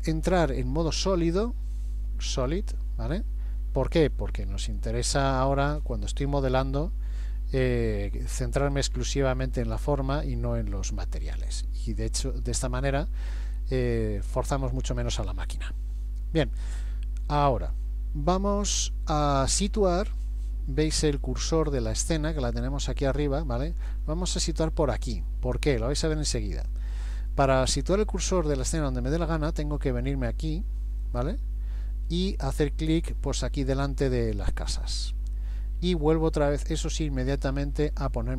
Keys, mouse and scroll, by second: 1.0 z, 3.6-4.1 scroll down 2, 4.1-4.8 scroll up 2, 5.2 shift+middle click, 6.0 middle click, 8.8 shift+middle click, 9.6 middle click, 31.1 click, 34.3 click.